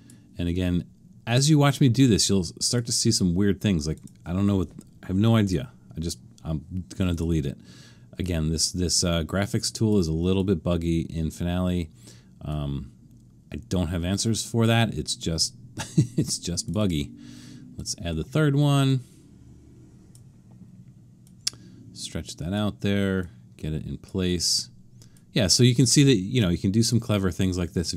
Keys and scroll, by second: 5.5 BackSpace.